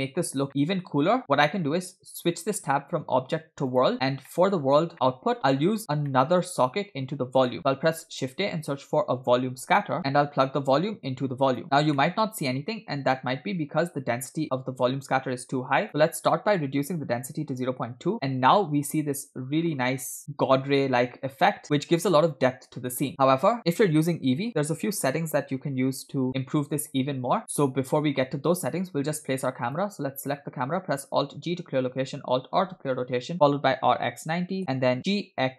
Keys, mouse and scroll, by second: 0.5 middle click, 2.1-3.9 drag, 4.3 middle click, 4.6-5.9 scroll up 2, 4.9 middle click, 6.1 middle click, 7.5 middle click, 7.9 shift+a, 10.8-11.6 drag, 12.0-13.0 middle drag, 15.8-17.9 drag, 18.5-19.9 middle drag, 21.6 middle click, 21.6-22.2 scroll down 1, 22.5-22.9 scroll up 2, 23.5-24.2 scroll down 2, 26.3-27.0 middle drag, 27.0 scroll down 2, 27.6-28.2 middle drag, 28.2-28.5 scroll up 1, 30.1 click, 31.2 alt+g, 33.2 alt+r, 35.0 scroll down 2, 35.1 g.